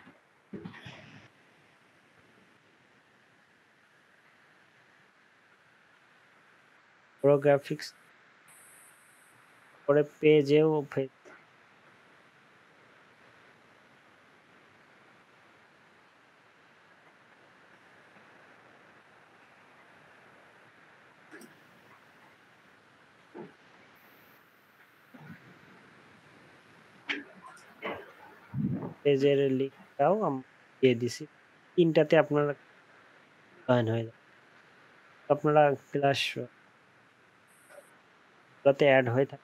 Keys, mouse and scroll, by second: 14.1 ctrl+a, 17.4 shift+Left, 17.7 shift+Left, 17.8 shift+Left, 26.9 ctrl+a, 27.2 ctrl+c, 27.2 typing, 30.7 ctrl+v.